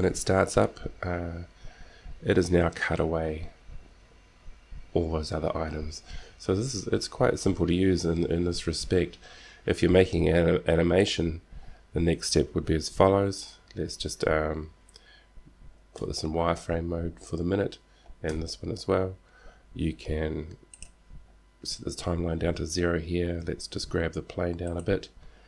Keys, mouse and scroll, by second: 16.1 z, 18.5 z, 20.9-23.0 drag, 23.6 g.